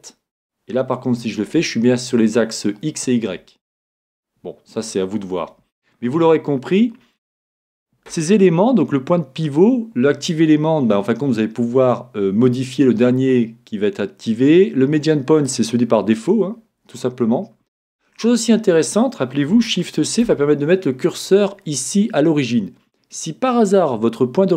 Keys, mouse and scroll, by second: 1.1 r, 7.6-9.6 drag, 20.1 shift+c.